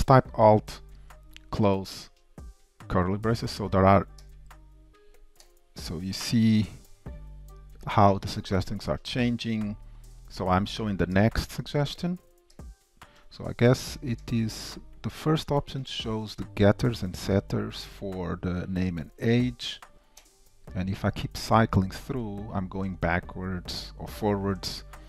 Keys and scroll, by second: 2.1 alt+], 11.2 alt+], 20.3 alt+], 21.6 alt+[, 23.8 alt+], 24.5 alt+[.